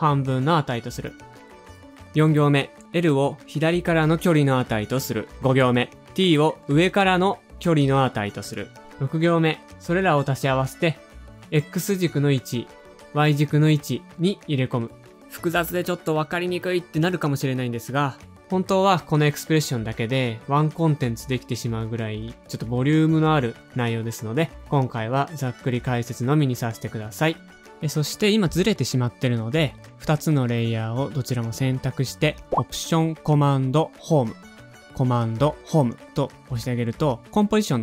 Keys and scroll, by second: 15.4-16.1 typing, 33.3 alt+super+Home, 34.7 super+Home, 37.6 shift+super+a.